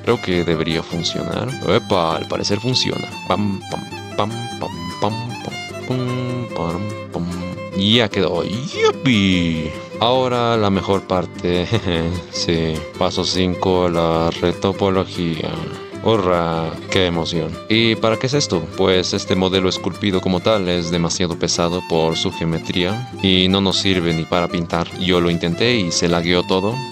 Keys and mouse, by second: 0.2 f, 1.9 shift+middle click, 2.3 middle click, 3.0 shift+middle click, 3.2 shift+f, 4.2 ctrl+z, 4.4 click, 5.3 click, 5.8 click, 7.7 shift+middle click, 8.1 click, 10.0 middle click, 12.0-12.5 middle drag, 13.3-14.6 middle drag, 15.5 shift+click, 16.5 middle drag, 17.3-17.6 middle drag, 17.8-18.7 middle drag, 19.2 shift+z, 19.5-20.0 drag, 20.3 shift+drag, 20.8 shift+click, 21.2 shift+drag, 21.6-22.0 shift+drag, 22.2 shift+click, 22.9 shift+click, 23.1 f, 23.3-26.9 drag.